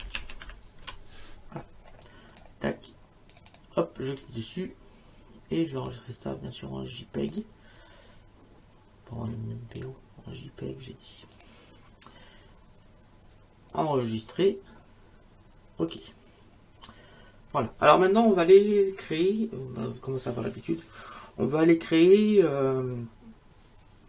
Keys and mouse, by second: 0.0-1.3 typing, 2.3 click, 5.8 click, 7.3 click, 9.8 click, 11.3 click, 13.7 click, 15.9 click.